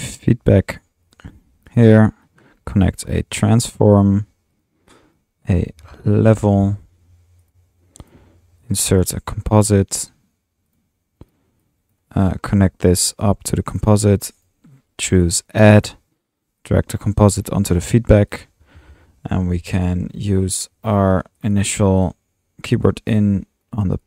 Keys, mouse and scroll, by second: 0.0-1.1 typing, 1.2 drag, 1.7-2.0 drag, 2.2-2.9 drag, 2.8-3.8 typing, 4.0 click, 4.5 drag, 5.6 Tab, 6.0-7.1 typing, 7.5-7.9 drag, 8.1 drag, 8.7 click, 8.9-9.7 typing, 9.2 click, 10.7-11.0 drag, 11.3 click, 11.6 typing, 11.9-12.6 drag, 13.3-13.7 drag, 13.8 click, 13.9 typing, 14.4 click, 15.1 click, 15.8 click, 17.7 drag, 18.4 click, 19.5 Escape, 20.2 click, 21.5 click, 22.1 click, 22.8 click, 23.1-24.0 typing, 23.7 click.